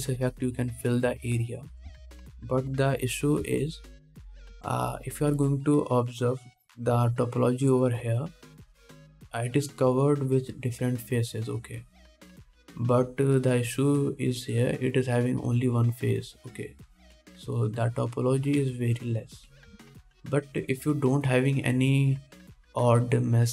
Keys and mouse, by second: 4.6 alt+a, 5.7 3, 7.7-9.7 drag, 8.1 c, 9.7-12.5 middle drag, 12.5 click, 12.6 middle click, 13.1 click, 13.5-23.5 middle drag, 21.0 ctrl+Tab.